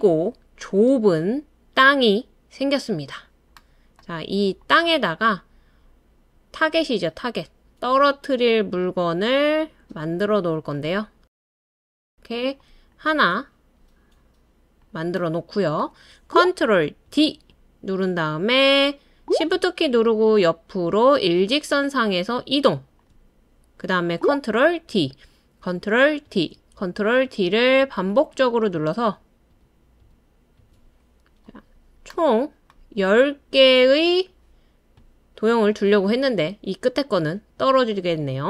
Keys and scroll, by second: 17.1 super+d, 24.9 super+d, 26.3 super+d, 27.3 super+d, 28.2 super+d, 29.0 super+d, 29.5 super+d, 30.0 super+d.